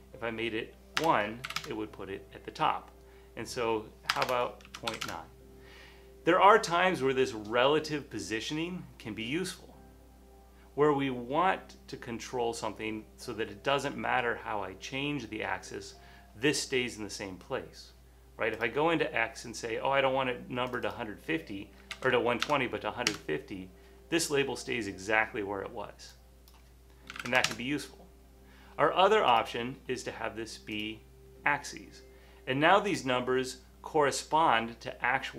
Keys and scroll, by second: 1.2 BackSpace, 1.2 BackSpace, 1.5 1, 1.6 Tab, 4.5-5.7 typing, 7.7-8.5 typing, 21.7-23.0 typing, 23.1 Home, 25.9-27.8 typing.